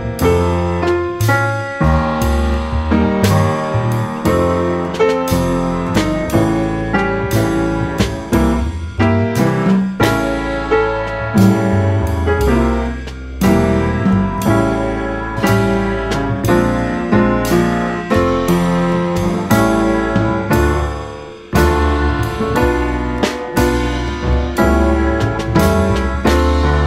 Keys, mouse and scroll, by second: 0.3 Tab, 0.6 middle click, 1.0 click, 1.1 click, 1.4-2.6 middle drag, 2.6 Tab, 2.8-4.8 drag, 5.0-6.3 middle drag, 6.3-6.6 drag, 7.2-7.8 drag, 8.5-10.5 drag, 11.0-12.1 drag, 12.3 Tab, 12.5-13.7 middle drag, 13.7 Tab, 14.0 Tab, 14.4 Tab, 15.2 g, 17.4 click, 17.5 click, 17.8 click, 17.9 click, 18.3 g, 19.9 Tab, 20.0 middle click, 20.6 Tab, 20.7 middle click, 21.1 Tab, 21.9 s, 22.7 Tab, 23.0 middle click, 23.2 Tab, 23.4-23.9 middle drag, 23.9 click, 24.1-24.5 middle drag, 24.5 scroll down 1, 24.7 click, 25.0 click, 25.3-25.8 right drag, 25.8-26.8 middle drag, 26.8 scroll down 2.